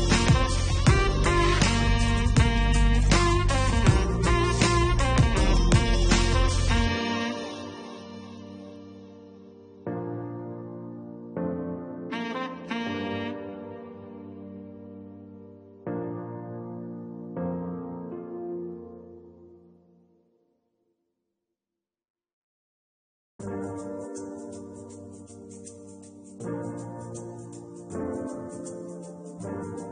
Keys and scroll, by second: 2.1 4, 16.0-18.2 typing, 19.2 Return.